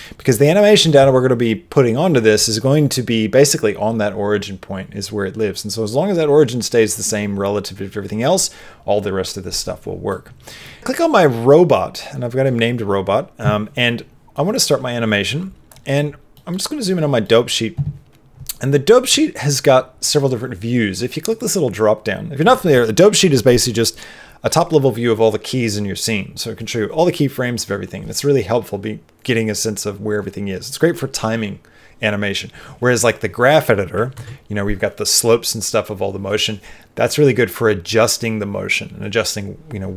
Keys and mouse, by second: 0.0 middle click, 0.5 middle click, 10.0 middle click, 14.3-15.6 middle drag, 21.9-33.0 drag, 34.1 ctrl+Tab.